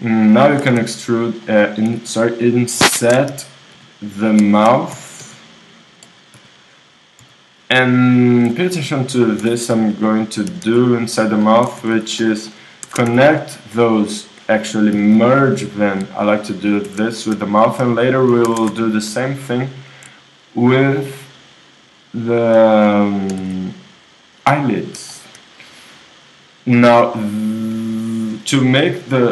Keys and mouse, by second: 1.4 s, 1.9 x, 3.3 s, 4.9 s, 7.2 i, 7.9-9.4 drag, 9.4 w, 10.5 s, 11.7 x, 11.9 x, 13.1 ctrl+Tab, 13.6-15.4 drag, 14.9 alt+m, 16.9 shift+r, 18.7 ctrl+Tab, 20.4-21.9 drag, 21.9-24.2 right drag, 23.3 s, 24.3-26.2 drag, 26.2 middle click, 26.5 click, 26.8-28.9 middle drag, 28.9-29.3 right drag.